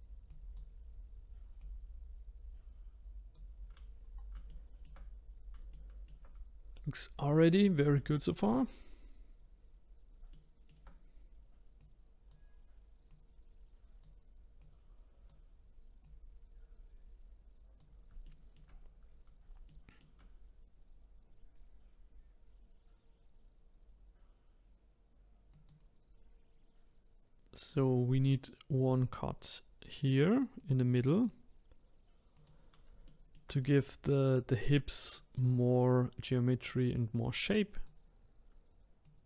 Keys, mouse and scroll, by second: 0.3-1.6 drag, 4.0-4.5 scroll down 3, 4.5-7.1 shift+middle drag, 7.1-7.6 scroll up 3, 8.0-9.4 shift+middle drag, 9.4-9.8 scroll up 2, 10.3 shift+middle click, 11.0-11.8 scroll up 2, 11.8 click, 13.1 click, 14.6 click, 16.0 click, 18.2 shift+middle click, 18.8 scroll down 1, 19.7-20.8 shift+middle drag, 20.8 scroll down 2, 21.5 scroll up 1, 25.5-28.7 drag, 30.6-33.0 drag, 33.0-34.7 shift+middle drag, 34.7-36.4 drag, 39.0 click.